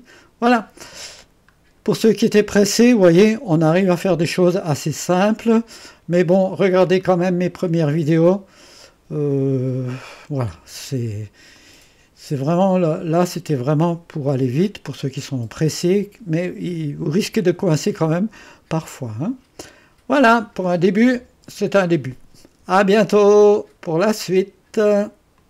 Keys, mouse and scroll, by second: 0.5 click, 1.3 click, 1.7-2.5 scroll down 1, 2.5-3.7 scroll up 1, 3.7-4.9 drag, 5.1-6.5 drag, 7.1 right click, 11.6 click, 18.0-20.3 drag, 23.6 right click, 25.4 click.